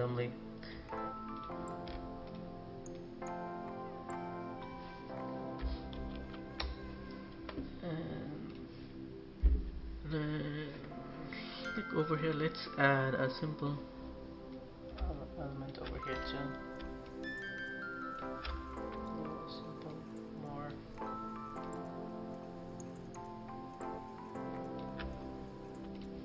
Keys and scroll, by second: 5.8 ctrl+-, 9.3 Delete.